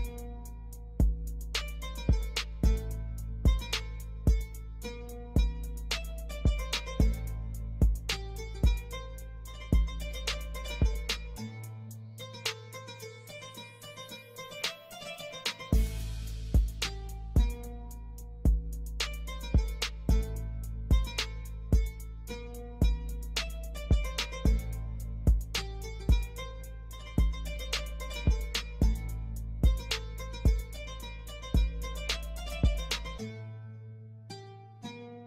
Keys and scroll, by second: 0.5 Escape, 2.2 F4, 3.7 F2, 10.9 ctrl+g, 11.7 ctrl+g, 12.1 F4, 14.4 ctrl+g, 17.5 shift+F2, 17.8 shift+Page_Up, 18.1 F3, 27.8 Escape, 30.3 F3, 34.6 shift+F2, 34.9 shift+Page_Up.